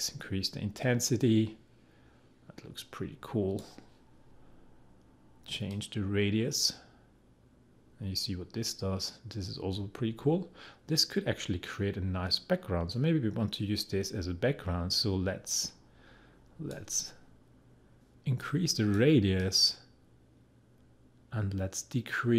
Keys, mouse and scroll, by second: 18.4-22.3 drag.